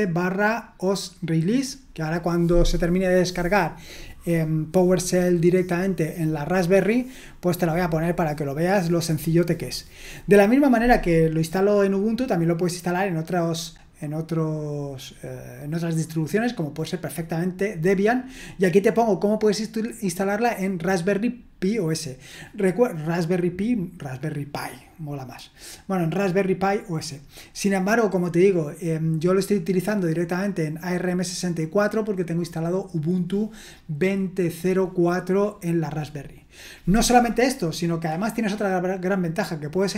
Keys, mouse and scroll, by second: 16.3-17.7 scroll down 1, 17.7-23.0 scroll down 1, 23.0-27.2 scroll down 1, 27.2-35.9 scroll down 1, 35.9-39.9 scroll down 1.